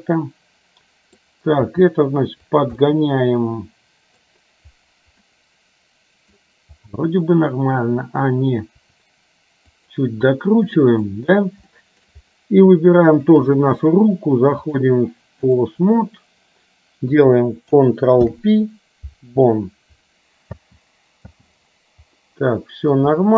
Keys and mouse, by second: 1.8 g, 2.9-4.3 middle drag, 5.4-6.4 middle drag, 8.9 r, 10.5 middle click, 11.8 shift+middle click, 13.1 shift+click, 14.9-15.9 drag, 18.3 ctrl+p, 20.6 space, 21.4 space, 22.3 middle click.